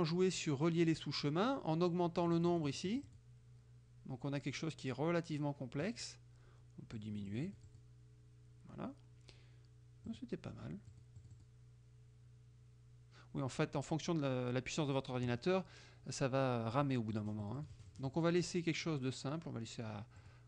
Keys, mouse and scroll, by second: 2.3-3.5 drag, 7.0-8.0 drag, 10.1 click, 11.0 click, 16.8 click, 17.2-18.4 drag, 20.2 click.